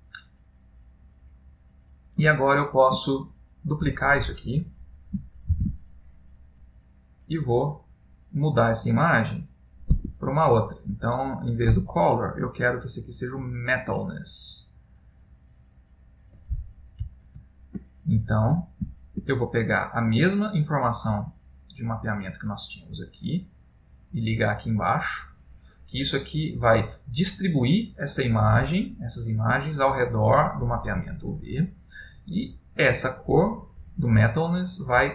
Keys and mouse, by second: 2.5 middle click, 3.5 ctrl+middle click, 3.5 click, 4.3 middle click, 5.8 shift+d, 7.5 middle click, 9.3 click, 10.9 click.